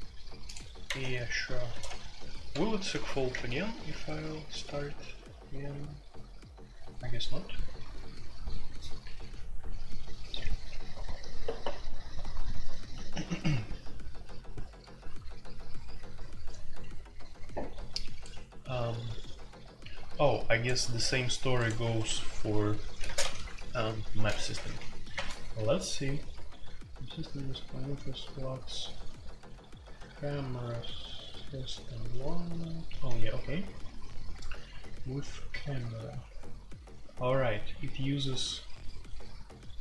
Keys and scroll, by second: 0.8-1.7 typing, 2.9 alt+p, 3.3 Return, 21.8 Escape, 23.0-24.8 typing, 25.1 Return, 27.1-27.8 typing, 33.3-36.4 typing.